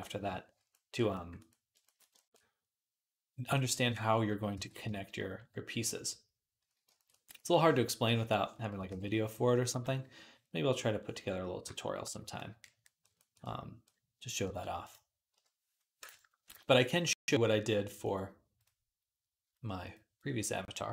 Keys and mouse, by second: 4.4 alt+q, 4.8 click, 4.8 middle click, 4.8-8.9 right drag, 6.5 d, 7.5-8.9 drag, 7.5-8.9 middle drag, 8.7 alt+q, 9.6 i, 14.3 alt+q, 15.2 KP_1, 16.4 ctrl+Tab, 17.0 ctrl+s.